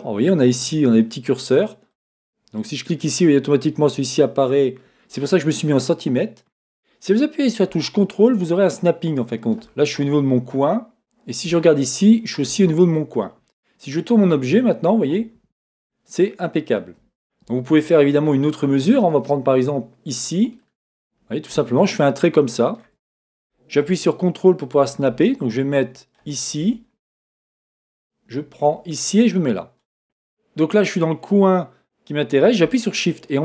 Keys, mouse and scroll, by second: 2.0-12.4 drag, 13.2-20.1 middle drag, 20.1 click, 20.4 click, 24.7-26.2 ctrl+drag, 26.2-28.4 middle drag, 28.4-29.8 ctrl+drag, 33.0-33.4 shift+drag.